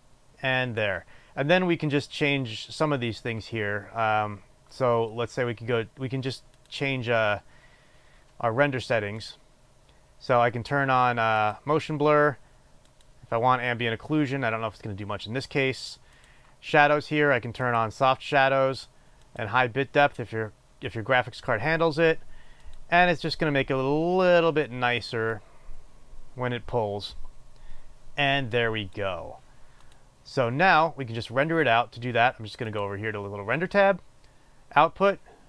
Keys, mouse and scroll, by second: 5.2-7.7 drag, 12.0 click, 13.5 click, 18.3 click, 19.9 click, 26.0-30.6 drag.